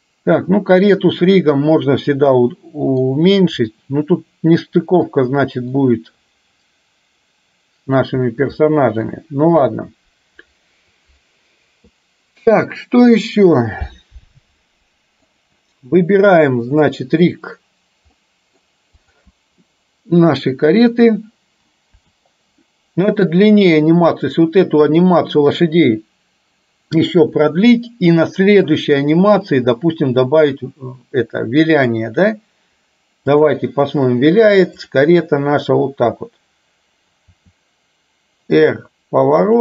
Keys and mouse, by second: 2.4 middle click, 3.7-5.2 middle drag, 5.8-8.0 middle drag, 8.7-9.2 shift+middle drag, 15.4 click, 16.9 click, 18.3 middle click, 19.2 click, 22.0 KP_7, 31.8-33.5 drag, 34.9 click, 37.4 r.